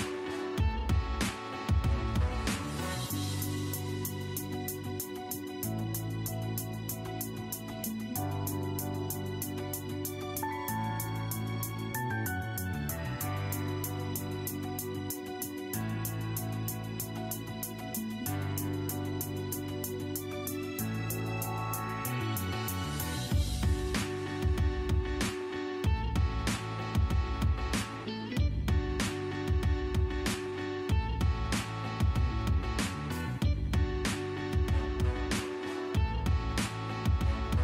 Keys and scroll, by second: 1.6-2.5 typing, 4.0-5.2 typing, 5.5 Escape, 12.3 Escape, 20.6 1, 22.4 0, 22.9 Return, 26.9 m, 27.0 space, 29.1 e, 29.2 space, 31.8 l, 31.9 space, 35.3 Escape, 35.8 e, 36.0 space.